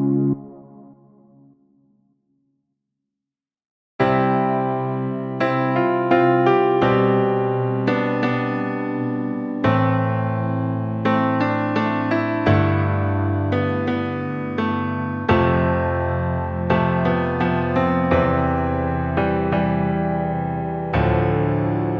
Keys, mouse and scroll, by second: 0.2 click, 1.2 z, 2.4 alt+z, 3.5-3.9 scroll down 3, 3.9 click, 4.9 alt+z, 5.3 click, 6.4 click, 7.7 alt+z, 8.0 click, 8.2 scroll down 3, 8.4 middle click, 8.9 scroll up 4, 9.6 Tab, 10.1 scroll down 2, 10.3 click, 11.9 shift+a, 16.4 click, 17.0 click, 18.7 Delete, 19.6 shift+a.